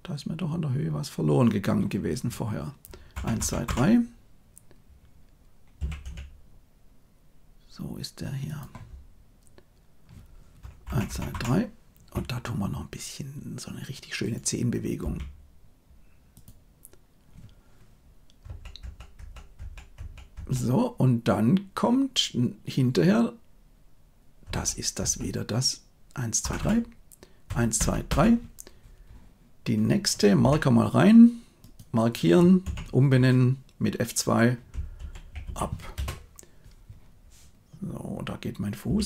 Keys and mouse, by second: 3.1 Left, 3.3 Left, 3.6 Left, 5.7 g, 10.8 Left, 11.0 Left, 11.3 Left, 14.2 click, 15.0 r, 18.4 Right, 18.8 Right, 19.1 Right, 19.5 Right, 19.9 Right, 20.3 Right, 24.4 Right, 24.9 Right, 26.4 Left, 26.5 Left, 27.4 Right, 27.7 Right, 28.0 Right, 30.3 m, 31.6 click, 32.6 F2, 38.8 g.